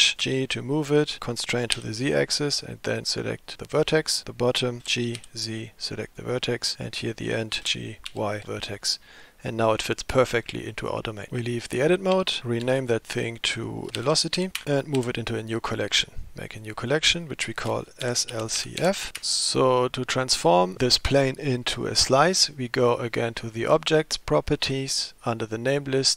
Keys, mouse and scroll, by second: 0.1 g, 3.7 click, 4.8 g, 6.7 click, 7.6 g, 12.2 Tab, 12.7 F2, 15.0 m, 23.1 click, 25.6-26.1 drag.